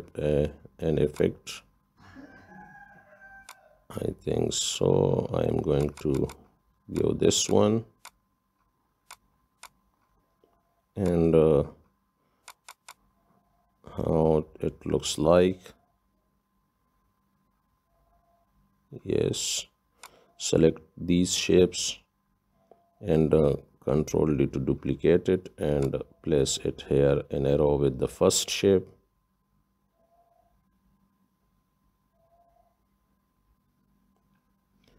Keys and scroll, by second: 24.5 ctrl+d.